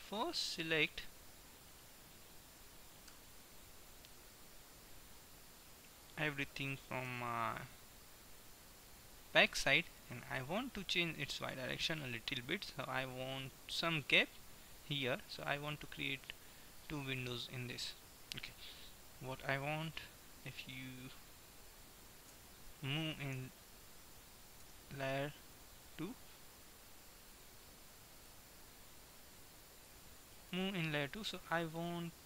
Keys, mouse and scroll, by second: 2.0 KP_1, 3.2 KP_3, 6.7-7.7 drag, 7.2 b, 9.0-10.5 drag, 11.0 g, 13.7-18.7 middle drag, 18.8 KP_1, 22.3 Tab, 23.3 n, 24.8 m, 27.8-29.7 middle drag, 29.8-31.7 drag, 31.7-32.2 middle drag.